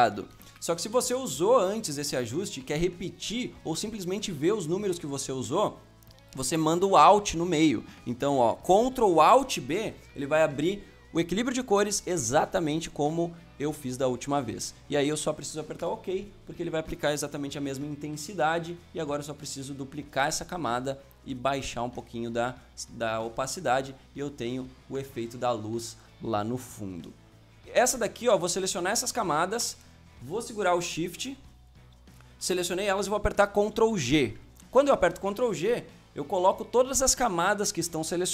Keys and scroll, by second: 0.3 Escape, 1.2 Escape, 9.7 ctrl+alt+b, 18.9 ctrl+j, 33.7 ctrl+g.